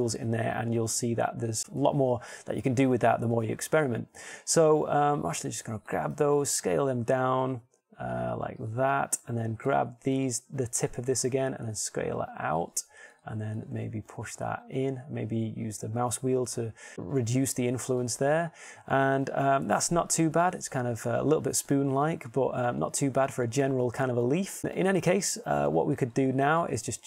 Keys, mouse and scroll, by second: 2.4 shift+scroll, 7.8 s, 12.6 g, 15.4 g, 19.7-21.2 middle drag, 24.6 Tab.